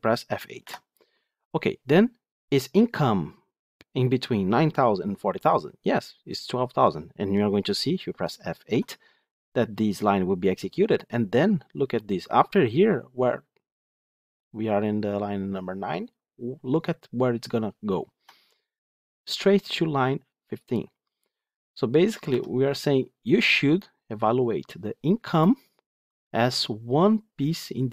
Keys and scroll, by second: 0.5 F8, 8.6 F8, 18.0 F8, 22.2 F9.